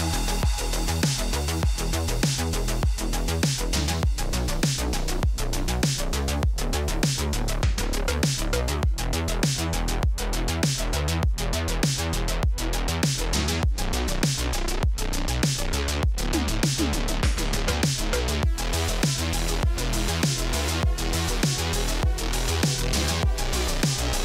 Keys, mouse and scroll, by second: 0.0 click, 1.2 click, 1.9 click, 2.9-4.2 typing, 6.8 click, 7.4-10.4 typing, 13.0 click, 14.9 typing, 15.3 click, 16.3 alt+click, 16.5-20.2 typing, 19.1 click, 22.6 click, 22.8-24.2 typing, 23.6 click.